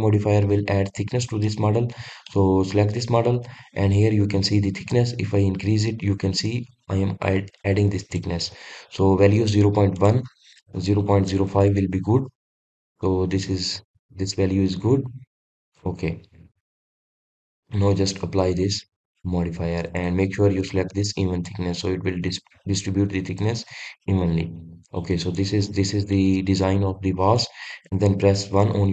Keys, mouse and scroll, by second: 2.1-5.1 middle drag, 5.6-8.7 drag, 10.6-13.4 drag, 13.4 scroll up 1, 13.6-14.1 scroll down 2, 14.1-16.5 middle drag, 16.5 click, 17.1-19.5 middle drag, 19.5-20.7 drag, 22.1 click, 22.8-25.1 drag, 25.1-25.9 middle drag, 25.9-26.3 scroll up 1, 26.3-26.8 scroll down 1, 26.8-27.9 middle drag, 27.9-28.9 scroll down 1.